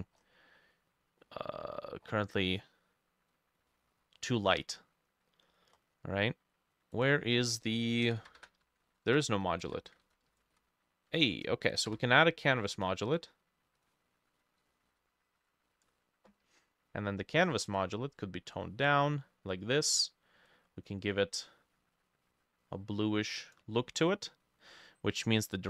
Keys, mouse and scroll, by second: 1.2 middle click, 2.1-2.7 scroll down 10, 3.7 middle click, 4.6-5.0 scroll up 3, 5.8-6.1 scroll up 5, 7.9-11.1 typing, 8.1-9.7 drag, 8.9 ctrl+middle click, 11.1 Escape, 11.9 Escape, 13.1 double click, 14.1-15.4 typing, 15.7 Down, 15.9 Return, 24.0 middle click, 24.5 middle click.